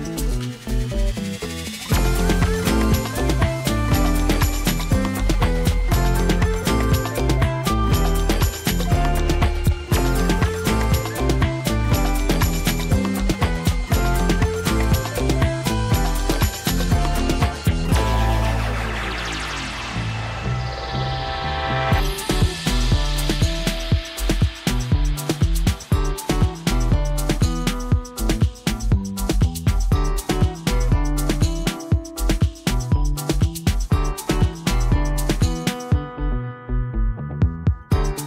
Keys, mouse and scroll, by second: 1.8 space, 2.0 right click, 2.2 click, 2.5 v, 2.8 space, 3.1 ctrl+click, 3.8 w, 4.1 click, 6.5 right click, 7.0 click, 14.0 shift+F6, 17.5 ctrl+l, 21.0-26.3 drag, 27.5 ctrl+d, 27.9 space, 28.1 right click, 28.3 click, 28.6 v, 29.4 alt+scroll down 1, 30.0 alt+space, 30.1 right click, 30.3 click, 34.2 space, 34.6 ctrl+click, 36.0 right click, 36.2 click, 36.6-37.0 scroll down 1, 37.0 space, 37.2 ctrl+click.